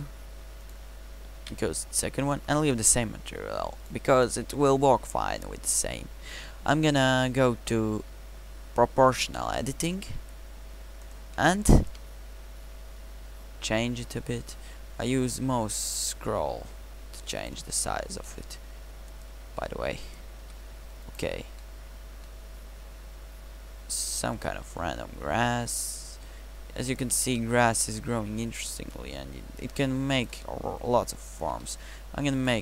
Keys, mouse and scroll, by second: 1.4 ctrl+v, 4.5 Tab, 9.1 o, 11.9 g, 19.8 click, 20.4 g, 24.7 g, 27.3 g, 31.6 g.